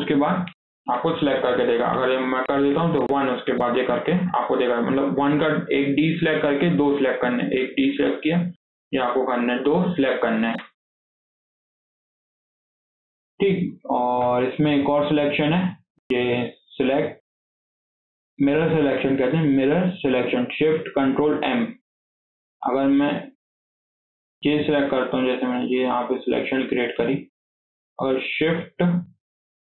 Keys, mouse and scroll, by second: 2.0-3.1 drag, 3.1 scroll down 2, 3.4-4.0 middle drag, 4.0 scroll up 1, 4.2-7.2 middle drag, 11.4-12.3 middle drag, 12.3 scroll down 2, 12.5-13.5 middle drag, 13.5 click, 14.0 KP_1, 14.6 scroll up 3, 14.9-15.3 shift+middle drag, 15.3 shift+scroll down 1, 15.5-16.5 shift+middle drag, 16.5-19.7 drag, 21.4-21.8 scroll down 3, 21.8 KP_7, 22.6 alt+z, 23.1 scroll up 2, 23.4-25.5 shift+middle drag, 25.5 click, 27.4-27.9 scroll down 2, 27.9-28.4 scroll up 3, 28.1 shift+middle click.